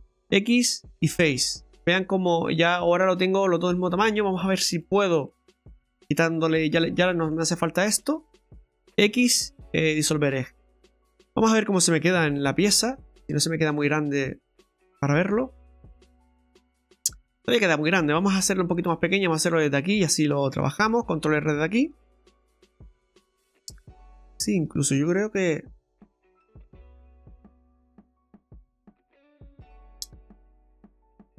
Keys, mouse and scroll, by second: 0.0 x, 1.4 middle click, 3.8 middle click, 4.7 click, 5.3 middle click, 6.0 right click, 6.4 alt+shift+right click, 7.1 middle click, 8.0 shift+right click, 8.8 x, 10.3 scroll down 2, 10.5 middle click, 14.5 click, 15.0 middle click, 18.5 Tab, 19.0 middle click, 19.9 Tab, 20.6 shift+middle click, 22.2 ctrl+r, 24.9 ctrl+r, 26.0 middle click, 27.4 ctrl+z, 28.6 ctrl+r, 29.4 middle click.